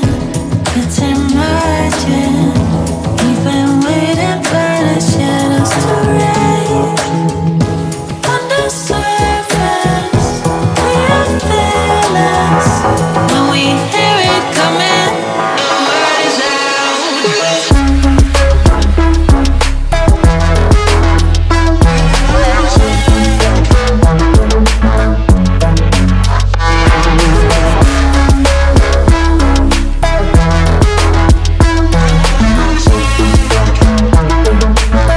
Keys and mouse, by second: 0.3 shift+middle click, 2.3 click, 3.3 g, 3.4 x, 7.3-8.5 middle drag, 8.5 Tab, 8.8 shift+z, 9.1 middle click, 9.8 click, 10.2 Tab, 11.1 KP_1, 11.8 shift+z, 12.1 click, 13.0 g, 13.1 x, 14.1 click, 15.0 Tab, 15.3 g, 15.4 x, 16.8 Tab, 17.3 click, 18.1 g, 18.2 x, 19.4 right click, 19.7 shift+z, 20.2 click, 21.0 g, 21.0 x, 22.5 middle click, 23.0 Tab, 23.2 middle click, 24.0 middle click, 26.0 click, 27.5 click, 28.3 click, 29.1 click, 29.9 2, 30.7 g, 31.4 click, 33.5 ctrl+middle click.